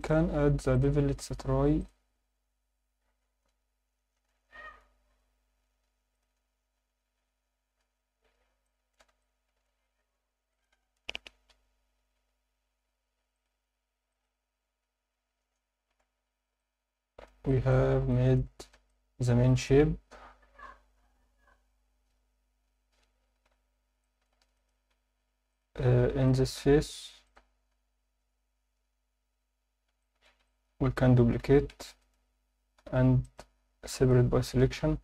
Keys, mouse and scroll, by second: 0.0 click, 0.7-2.3 drag, 4.7 click, 6.1 click, 7.8-8.4 scroll up 2, 8.6 alt+shift+middle drag, 9.2-9.6 ctrl+alt+middle drag, 10.5-11.8 drag, 15.2-15.8 scroll down 4, 15.8 alt+a, 16.6-17.3 alt+middle drag, 17.5 alt+shift+middle drag, 18.1 ctrl+alt+middle drag, 18.9-19.3 ctrl+alt+middle drag, 19.5 alt+shift+middle click, 24.0 alt+shift+middle drag, 24.5 click, 25.0 Tab, 25.5 click, 26.3 shift+click, 26.8 shift+click, 27.3 shift+click, 27.8 scroll up 1, 30.0 alt+shift+middle click, 30.5 ctrl+alt+middle click, 31.5 shift+d, 32.0 right click, 32.8 p.